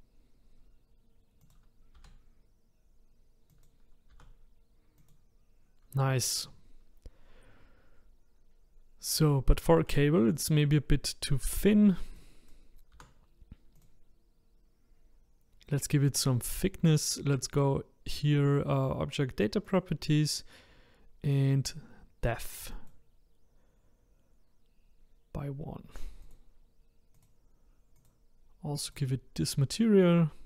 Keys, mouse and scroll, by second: 1.9 g, 4.1 r, 8.6-9.6 scroll up 2, 9.6 shift+middle click, 10.4 click, 12.1 click, 12.9 r, 19.6 click, 20.7-22.3 scroll down 4, 22.7-25.7 drag, 26.2 click, 27.1 click, 27.9-29.8 drag, 29.8-30.4 scroll down 1.